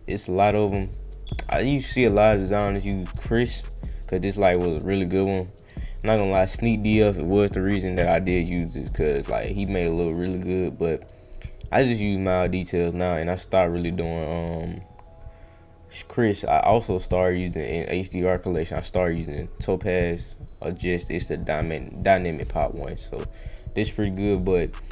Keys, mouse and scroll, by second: 3.0 click, 3.5 click, 4.1 click, 4.4 click, 5.6 click, 6.0 click, 6.3 click, 8.2 click, 10.5 click, 15.8 click, 17.1 click, 18.1 click, 18.7 click, 21.6 click, 22.3 click, 23.2 click, 24.1 click.